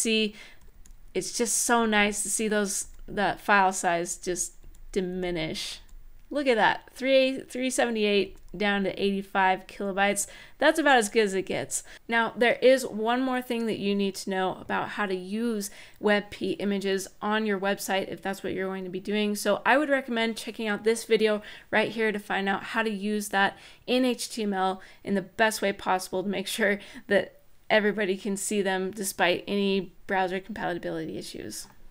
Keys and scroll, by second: 0.3 Up, 0.6 Page_Down, 1.5 Page_Down, 2.5 Down, 4.4 Up, 4.4 Down, 4.9 Page_Down, 5.5 Page_Down, 6.1-6.8 scroll down 1, 6.8 scroll up 1, 8.0-9.2 scroll down 1.